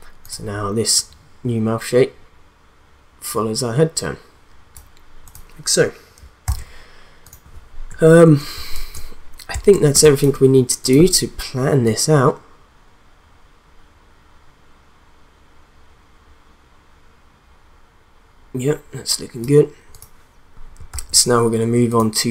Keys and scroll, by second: 6.4 ctrl+s, 8.5 space, 9.9 space, 20.9 ctrl+s.